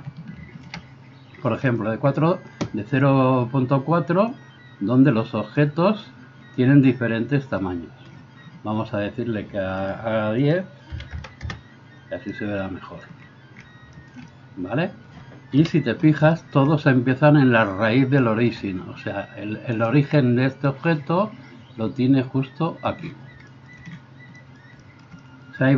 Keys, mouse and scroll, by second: 10.0 middle click, 10.4-25.7 drag, 15.6 KP_1, 19.8 middle click, 19.8 right click.